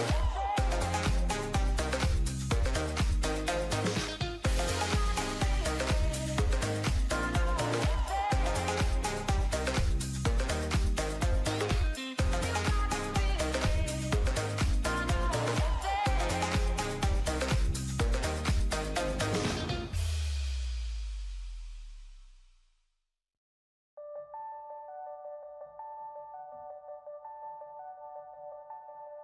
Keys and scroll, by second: 5.8 ctrl+=, 6.3 ctrl+=, 9.3 ctrl+=.